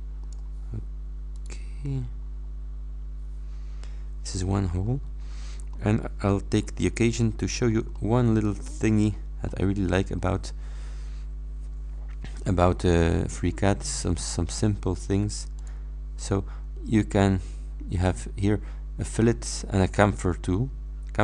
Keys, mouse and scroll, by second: 1.4 click, 2.3-2.7 scroll up 2, 4.9-5.6 scroll up 3, 5.8-6.8 middle drag, 7.1-8.0 scroll up 2, 8.0-9.3 middle drag, 8.5 click, 9.6 middle click, 15.6 click.